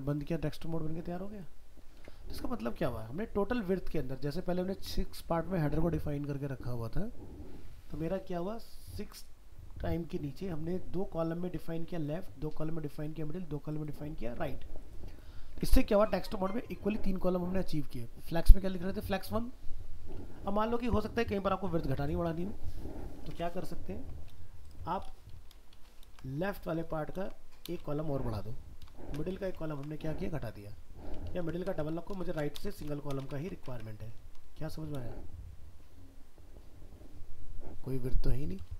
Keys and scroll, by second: 2.0 alt+Tab, 15.5 alt+Tab, 23.3 alt+Tab, 25.8 ctrl+shift+Left, 26.0 ctrl+c, 27.2 ctrl+v, 29.0 ctrl+shift+Right, 29.7 ctrl+s, 31.3 ctrl+z, 32.2 ctrl+shift+Left, 33.3 ctrl+s, 33.7 alt+Tab.